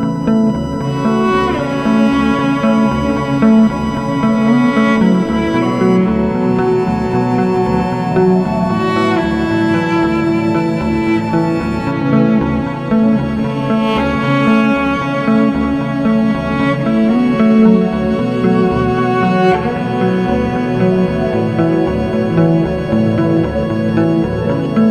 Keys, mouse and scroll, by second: 3.6 double click, 6.1 click, 8.5 click, 12.3 click, 14.4 click, 15.4 F4, 17.0 F9, 19.7 F8, 19.8 click, 20.8 click, 22.4 click, 22.8 double click, 23.6 click, 24.2 scroll up 1, 24.8-24.9 scroll down 1.